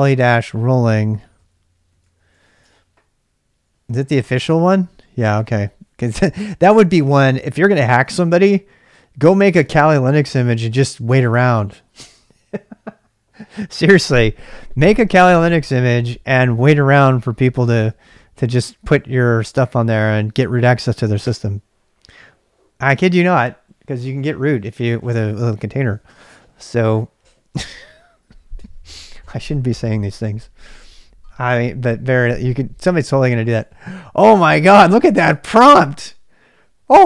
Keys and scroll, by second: 0.0-2.8 typing, 4.1 super+Tab, 5.3 super+Tab, 5.6-6.3 typing.